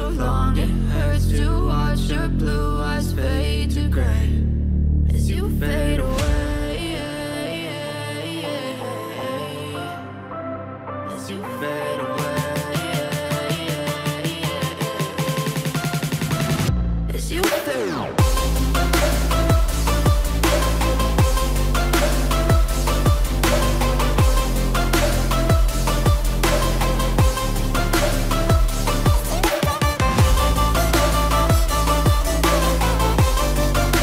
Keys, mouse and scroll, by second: 5.4 click, 5.4-10.4 drag, 10.4 click, 16.1-19.6 ctrl+drag, 19.6-21.9 drag, 21.9 ctrl+shift+d, 22.5-30.8 drag, 31.9 p, 32.8-34.0 drag.